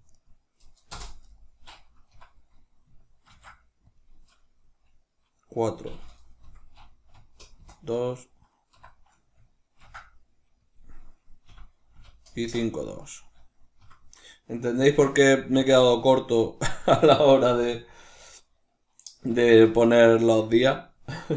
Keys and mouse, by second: 0.0-1.3 right drag, 0.9 Return, 2.0 F2, 7.8 right click, 8.6 F2, 12.8 right click, 13.7 F2.